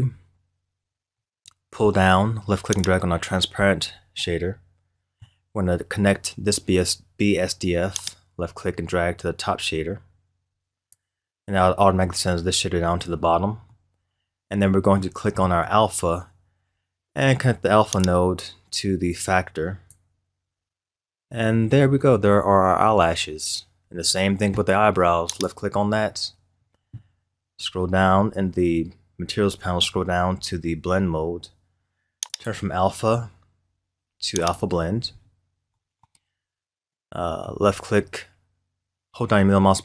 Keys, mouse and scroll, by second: 2.8 click, 4.2-7.2 middle drag, 8.0-8.5 drag, 13.7-18.0 middle drag, 18.0 drag, 21.8-23.1 scroll down 1, 23.3 scroll up 1, 25.3 click, 27.6-28.4 scroll down 8, 29.5-30.8 scroll down 7, 30.8 scroll down 5, 32.2-35.3 drag, 35.7-39.8 middle drag.